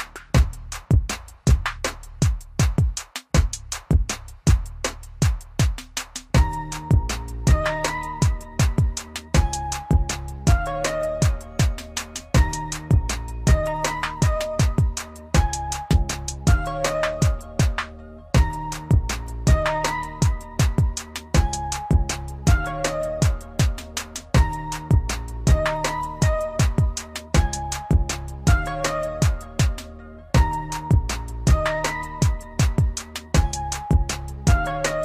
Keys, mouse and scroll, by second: 1.8 click, 8.6 typing, 9.7 typing, 10.1 click, 13.9 typing, 18.0-20.4 typing, 21.5 click, 27.6 typing, 33.6 click, 33.6 typing.